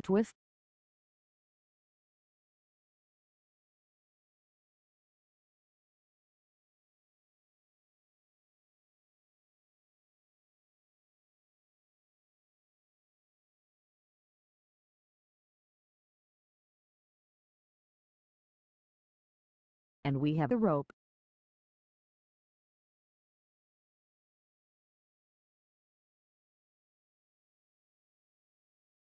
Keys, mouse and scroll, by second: 27.0 Tab.